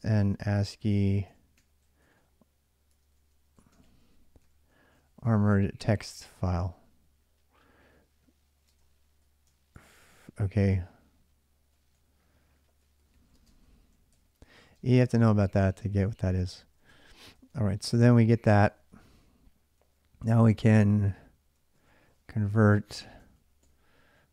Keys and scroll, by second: 0.0-6.2 typing, 8.5-24.3 typing.